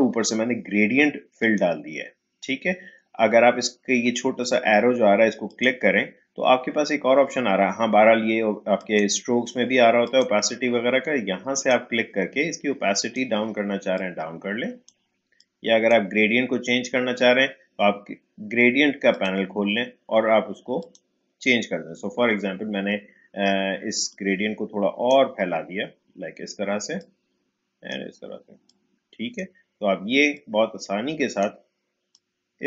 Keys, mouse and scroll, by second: 1.4 click, 5.4 click, 8.7-18.3 drag, 19.1 click, 24.1-32.6 drag.